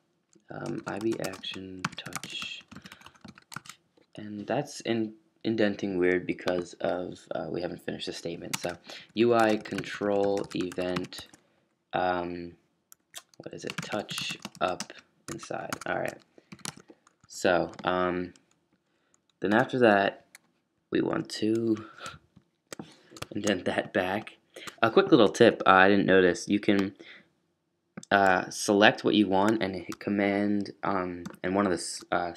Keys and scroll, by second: 0.0-2.7 typing, 3.5 shift+super+], 8.5-11.4 typing, 13.0 Escape, 13.5-17.9 typing, 15.3 Tab, 15.7 Tab, 23.7 shift+super+[, 24.1 shift+super+[, 31.2 ctrl+super+[.